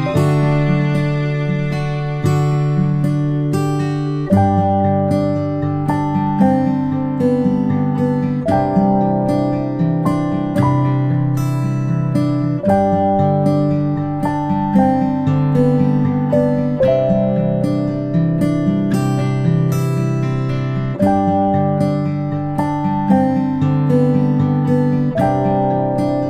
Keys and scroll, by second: 16.9 ctrl+p, 20.2 ctrl+z, 20.9-22.3 space, 22.5 space, 22.8 space, 25.6 ctrl+c.